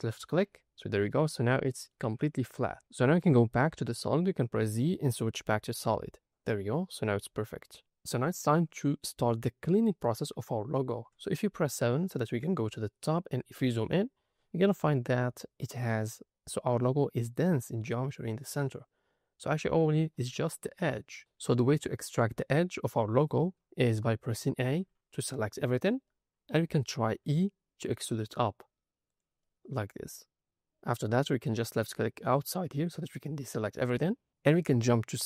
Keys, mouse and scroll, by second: 0.3 middle click, 2.1 Tab, 2.4 middle click, 4.5 z, 5.4 middle click, 6.4 middle click, 6.8-7.3 scroll up 1, 10.1 middle click, 12.3 KP_7, 13.2-13.9 scroll up 5, 14.9 scroll down 3, 17.4 click, 20.3 shift+middle click, 20.9 scroll up 2, 21.1 scroll down 1, 24.7 a, 25.6-26.0 scroll down 2, 26.0 middle click, 27.3 e, 29.0 click, 29.3 middle click, 32.2 click.